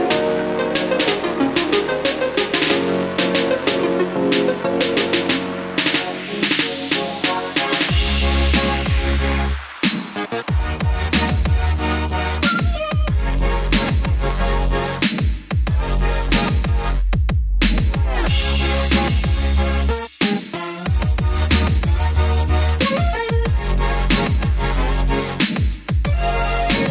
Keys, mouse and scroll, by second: 11.8 scroll up 1, 17.3 click, 20.4 KP_5, 22.0-26.4 drag.